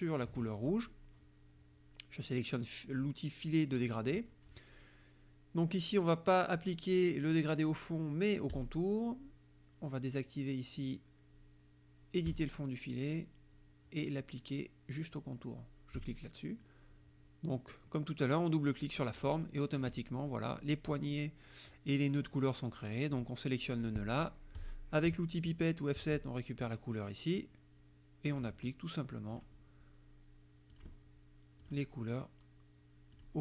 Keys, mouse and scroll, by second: 3.8 click, 8.5 click, 12.4 click, 16.0 click, 19.1 click, 20.3 click, 24.7 click, 26.0 F7, 26.7 click, 28.3 click, 29.4 click, 30.8 click, 31.7 click, 33.2 click.